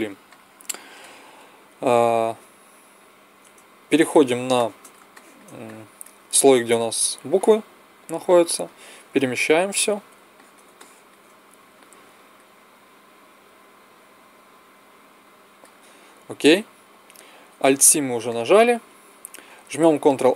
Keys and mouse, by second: 0.2-1.6 drag, 4.4 middle click, 8.5-10.3 drag, 10.3-12.1 middle drag, 12.1 click, 13.2-15.3 drag, 17.6 alt+c, 19.9 ctrl+a.